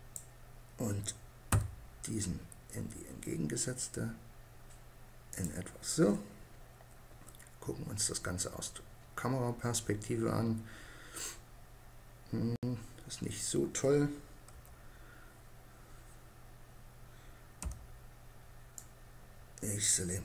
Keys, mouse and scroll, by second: 1.1 r, 4.9-6.6 drag, 6.6 KP_0, 13.9 KP_7, 17.1 b.